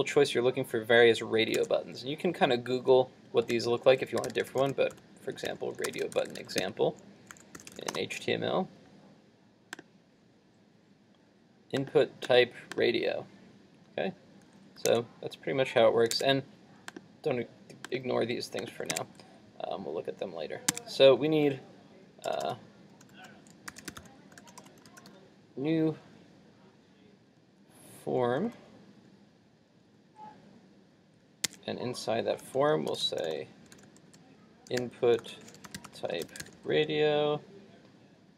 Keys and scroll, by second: 3.6 super+t, 14.9 super+Tab, 16.1 super+Tab.